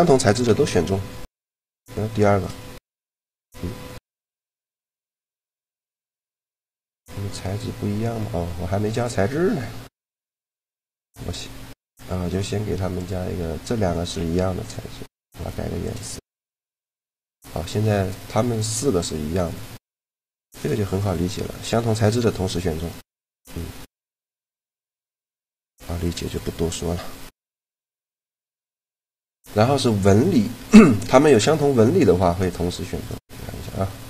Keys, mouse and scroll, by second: 0.2 shift+l, 3.0-4.1 right drag, 4.1 click, 4.1 shift+l, 5.8-10.1 drag, 7.9-10.1 right drag, 10.1-11.8 middle drag, 10.7-12.0 right drag, 12.0 middle click, 12.4-13.8 drag, 13.9 g, 15.0-16.6 drag, 20.0 shift+l, 21.2-23.0 drag, 22.2 g, 25.3 a, 28.3 shift+l, 32.8-34.0 right drag, 33.3-34.0 drag.